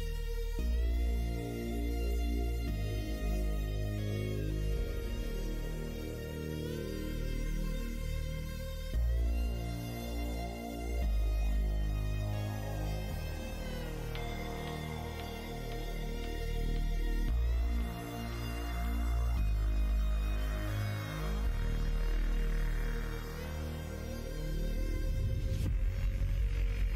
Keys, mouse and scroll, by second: 2.9 middle click, 3.9-5.5 middle drag, 7.3 click, 8.0 g, 9.3 middle click, 11.0 scroll up 1, 11.0 middle click, 11.4 shift+middle click, 12.5 g, 14.3 click, 14.9 middle click, 16.1 g, 17.4 click, 17.8 g, 18.9 middle click, 20.2 click, 20.4 g, 21.6-22.9 drag, 22.1 g, 23.4 click, 24.3 g, 26.2-26.9 middle drag.